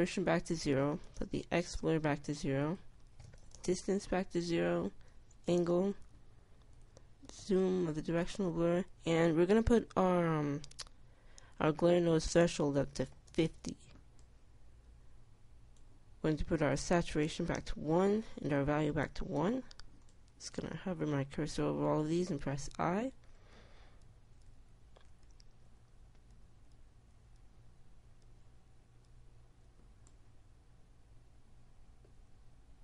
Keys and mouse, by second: 23.8 i, 24.6 i, 25.4 i, 26.5-29.8 typing.